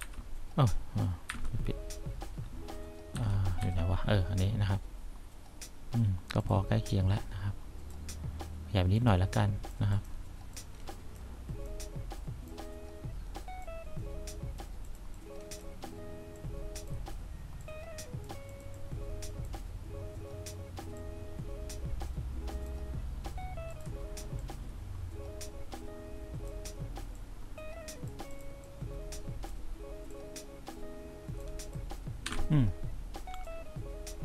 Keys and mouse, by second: 0.1 F5, 1.4 F4, 3.3 F2, 3.8 F3, 7.7 click, 9.1 click, 10.0 click, 10.6 click, 11.8 click, 13.9 click, 15.3 click, 16.5 click, 17.8 click, 18.9 click, 21.1-22.8 drag, 24.6-26.6 drag, 28.9 click, 30.2 click, 32.4 F1.